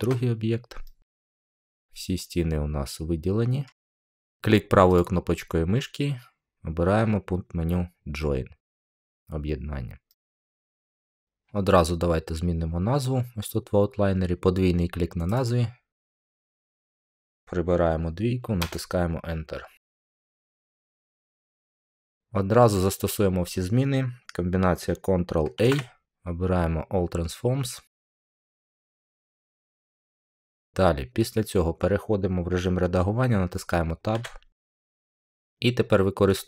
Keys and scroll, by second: 16.8 BackSpace, 18.6 Return, 25.5 ctrl+a, 34.0 Tab.